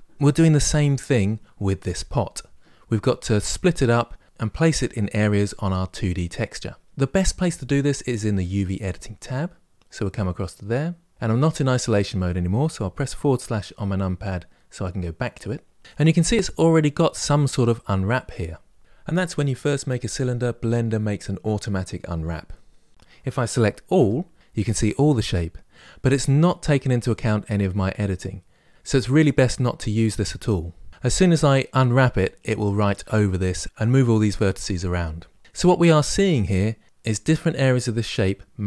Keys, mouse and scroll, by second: 9.0 click, 11.1-13.2 middle drag, 13.2 KP_Divide, 14.2-15.8 scroll down 2, 23.7 a, 26.4-38.6 middle drag.